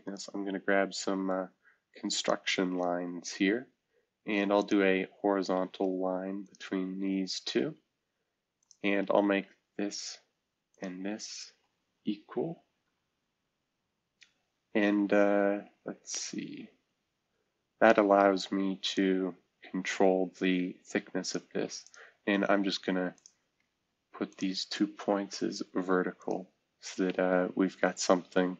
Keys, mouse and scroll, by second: 3.0-4.5 scroll up 1, 7.7 Escape, 8.9-9.7 scroll down 1, 12.8 e, 25.6 v, 26.6-27.2 scroll down 1.